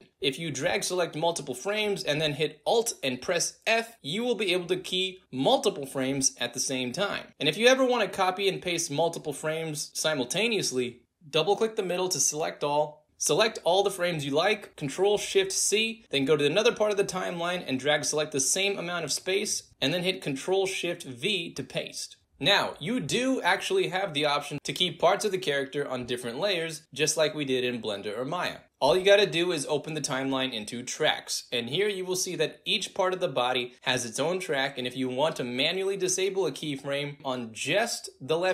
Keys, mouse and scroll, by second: 1.3-2.6 drag, 4.7 alt+f, 7.2 click, 7.9 click, 11.0 click, 12.7-14.2 drag, 15.4 ctrl+shift+c, 16.0 click, 16.3 ctrl+shift+v, 16.7-18.7 ctrl+drag, 20.3 ctrl+shift+v, 22.0 ctrl+shift+click, 22.4-23.5 drag, 23.8 click, 24.2 space, 30.2 click, 31.4-32.6 drag, 33.6 click, 34.9 click, 35.9 click, 38.1 click.